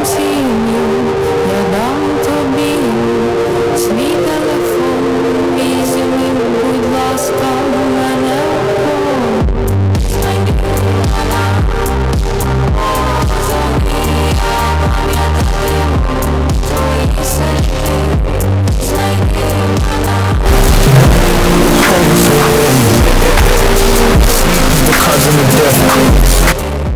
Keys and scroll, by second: 26.5 Page_Down.